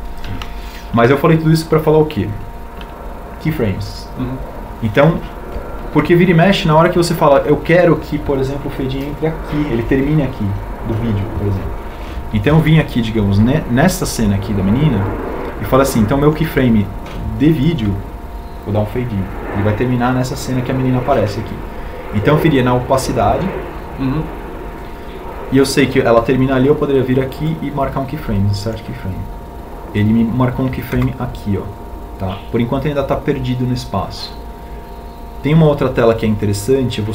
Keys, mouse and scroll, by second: 15.5 ctrl+Right, 34.2 Home.